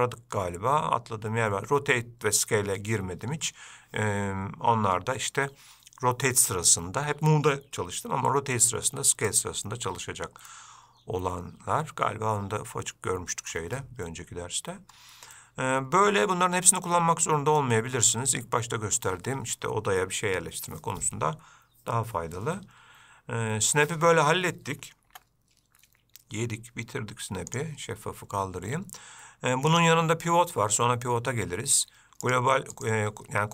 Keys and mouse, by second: 10.8-13.8 middle drag, 15.7-17.9 middle drag, 25.4 Tab, 27.8 click, 30.1-32.7 drag, 33.1-33.5 drag.